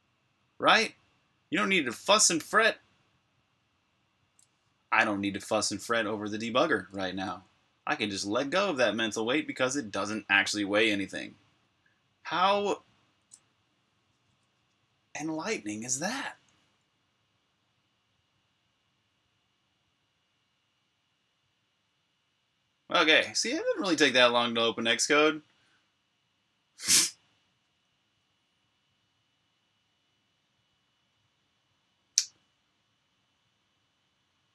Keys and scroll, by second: 0.0-0.6 typing, 0.4 super+o, 2.6 Return.